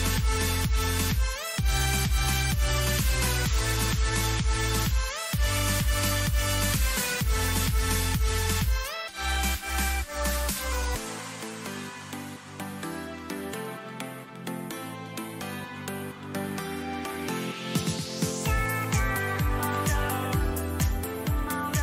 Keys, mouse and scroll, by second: 1.4-14.7 middle drag, 21.2 KP_7.